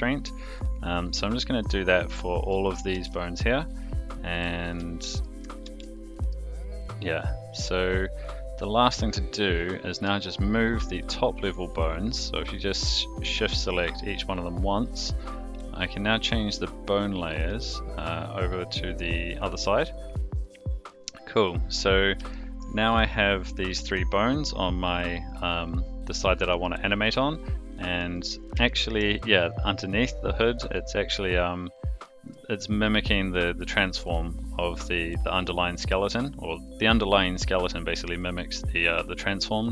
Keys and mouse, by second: 0.9 click, 1.9 shift+click, 2.9 ctrl+shift+c, 4.4 click, 5.6 ctrl+shift+c, 10.6 shift+click, 11.5 shift+click, 16.1-19.3 drag, 20.4 click, 21.2 click, 22.3 shift+middle drag, 24.8 click, 25.3 click, 25.4 click, 25.6 click, 26.2 click, 26.5 r, 27.7 click, 28.0 r, 28.6-29.0 shift+middle drag, 30.6 click, 37.3 click, 38.5 click.